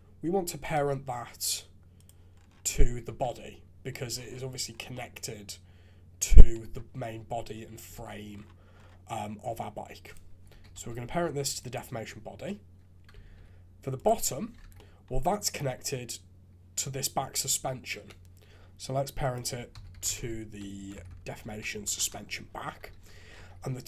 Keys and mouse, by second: 1.9 click, 3.1 shift+z, 3.8 middle click, 4.9-6.6 middle drag, 7.5 KP_3, 7.9 shift+z, 10.1-11.7 drag, 13.2 alt+a, 13.9 click, 14.6 shift+z, 14.7 middle click, 18.0 KP_3, 20.9 Down, 21.0 Down, 22.9 alt+a, 23.3 shift+z.